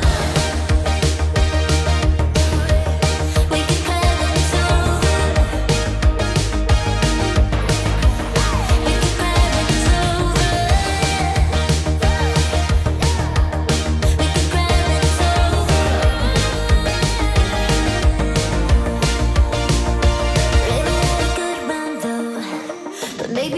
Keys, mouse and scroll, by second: 1.5 click, 2.3-3.3 typing, 2.5 click, 3.8 Return, 5.7 click, 11.0 click, 11.1-14.2 shift+drag, 15.6 5, 15.8-18.5 Return, 18.3-23.5 drag.